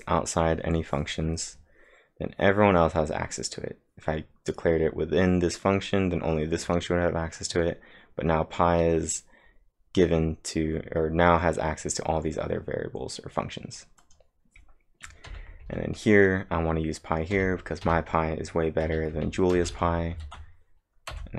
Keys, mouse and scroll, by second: 0.5-0.9 scroll up 6, 1.5 scroll down 2, 13.8-16.1 typing, 14.0 click, 14.0-14.5 scroll down 1, 17.3 k, 18.8-19.6 typing, 20.2 ctrl+`, 21.1 Up.